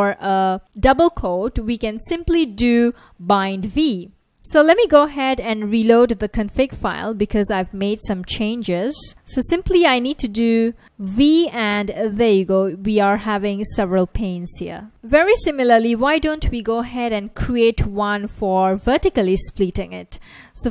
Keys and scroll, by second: 4.0 super+Tab, 6.9 ctrl+a, 7.1 r, 10.6 ctrl+a, 10.8 v, 11.8 ctrl+a, 12.8 v, 12.9 ctrl+a, 13.5 v, 16.8 super+c, 18.5 super+v.